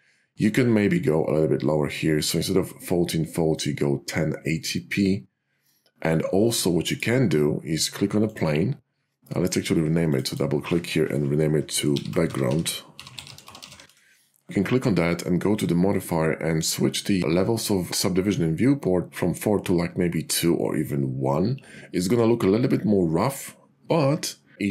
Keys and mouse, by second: 10.2 click, 10.3-11.6 drag, 12.1-14.5 drag, 15.8 click.